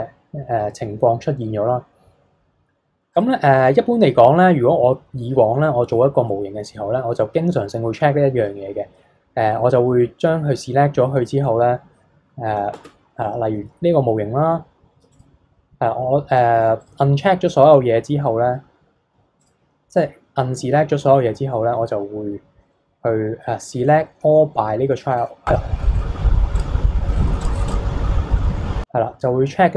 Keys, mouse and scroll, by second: 3.1 click, 6.3-9.4 middle drag, 12.7 Tab, 15.1 click, 16.8 click, 19.4-22.5 drag, 26.6 click, 27.7-29.6 drag.